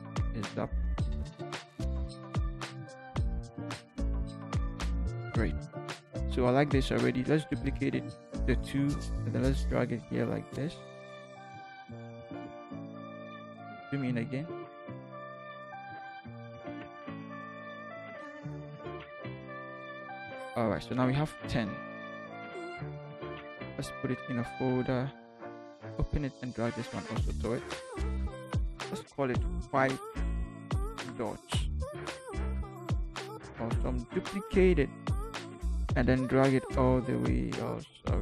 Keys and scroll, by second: 0.0 Up, 0.6 Up, 4.6 ctrl+Down, 7.8 ctrl+j, 12.2 shift+Left, 12.8 shift+Left, 13.5 ctrl+shift+=, 15.1 Left, 15.3 Left, 15.5 Left, 16.7 Left, 17.5 ctrl+shift+z, 18.8 ctrl+shift+j, 19.5 ctrl+j, 23.9 ctrl+shift+g, 29.5-31.5 typing, 32.7 0, 34.1 j.